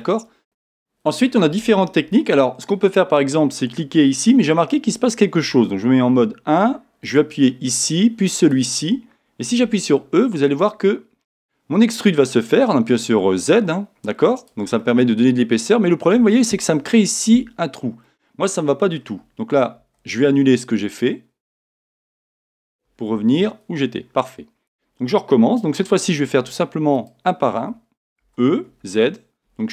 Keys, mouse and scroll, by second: 6.1 1, 7.0 alt+click, 8.4 alt+click, 11.5 e, 14.5 click, 14.8-26.9 middle drag, 21.6 z, 23.2 z, 26.9 alt+click.